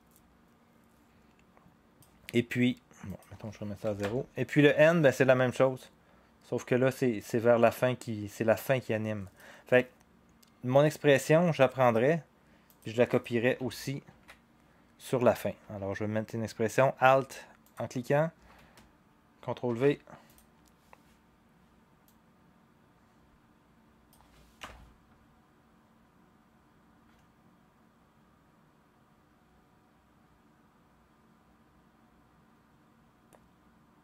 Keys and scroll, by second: 3.8 0, 4.0 Return, 14.1 ctrl+c, 19.7 ctrl+v, 24.6 0.